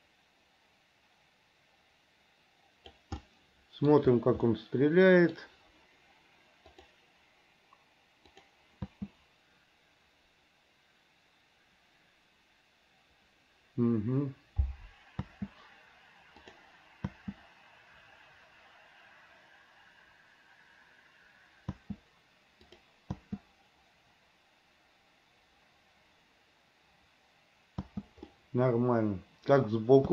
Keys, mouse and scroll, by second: 3.4 middle click, 4.6 middle click, 7.0 click, 8.6 click, 9.1 space, 15.4 space, 16.7 click, 17.3 space, 21.9 space, 22.9 click, 23.4 space, 28.0 space, 28.6-29.7 middle drag.